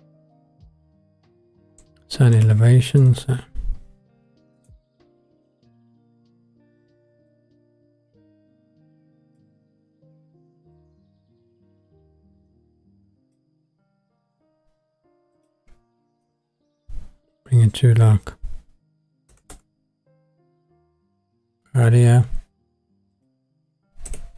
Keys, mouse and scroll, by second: 2.4-4.6 drag, 7.3-9.5 drag, 10.7-13.3 drag, 15.3-19.5 drag, 21.6 click, 21.6 scroll down 3, 23.1-24.3 drag.